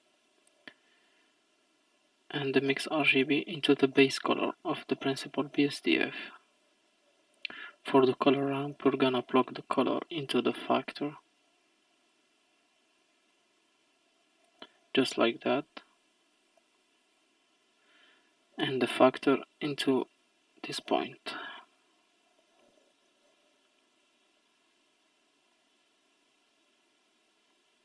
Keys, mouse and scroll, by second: 1.1 click, 4.4-6.4 middle drag, 6.4-9.4 drag, 9.6-11.2 drag, 13.3 click, 15.6 middle click, 16.4-16.8 scroll down 2, 16.8 middle click, 17.4 scroll down 1, 17.5-18.3 scroll up 6, 19.7-21.4 drag, 21.4-22.3 scroll down 4, 23.3 scroll down 1, 23.6-24.3 middle drag, 24.3-25.6 scroll up 14, 25.6 middle click, 26.5-27.4 scroll up 1, 27.6-27.8 middle drag.